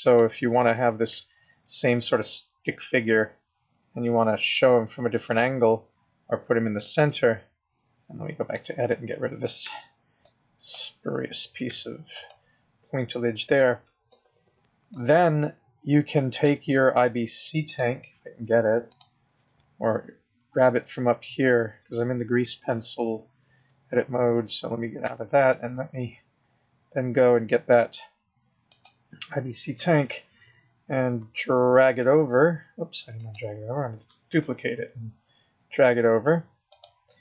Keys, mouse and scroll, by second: 1.1 g, 8.6 Tab, 9.6 b, 11.7 x, 12.7 scroll up 2, 14.1 shift+middle click, 16.3 click, 17.7 click, 18.9 click, 20.1-21.2 scroll up 1, 21.2-21.7 scroll up 3, 21.7 scroll down 6, 22.6-24.3 scroll up 1, 25.0 Tab, 26.2-28.1 scroll down 5, 28.1-28.7 scroll down 1, 28.7 click, 31.2 g, 34.4 shift+d.